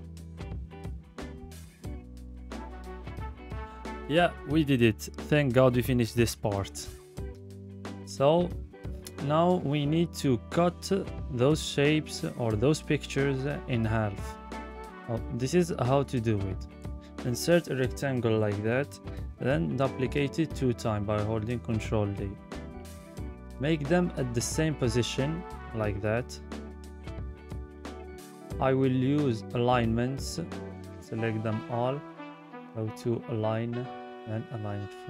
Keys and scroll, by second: 17.9 ctrl+d, 18.4 ctrl+d.